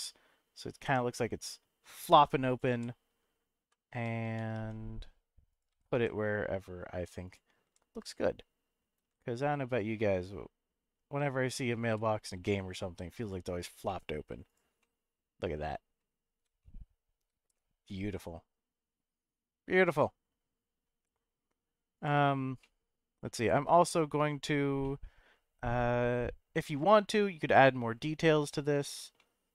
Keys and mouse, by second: 2.4 click, 2.7 g, 3.5 x, 4.3 u, 4.5 y, 5.5 click, 5.7 g, 5.9 z, 7.2 click, 7.6 g, 9.0 y, 9.7 click, 10.1-11.7 middle drag, 11.8 g, 12.3 z, 13.2 click, 14.0 middle click, 14.8-16.0 middle drag, 16.6 shift+middle click, 17.5-20.8 middle drag, 22.0 click, 22.6 middle click, 24.8-28.5 middle drag, 29.2-29.5 middle drag.